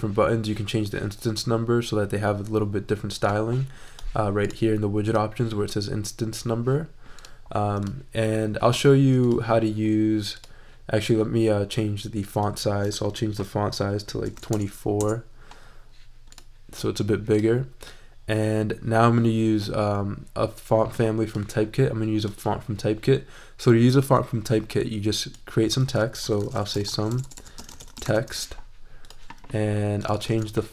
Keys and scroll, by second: 13.0 super+a, 14.0-14.9 typing, 14.9 Return, 26.1-28.4 typing, 30.4 super+a.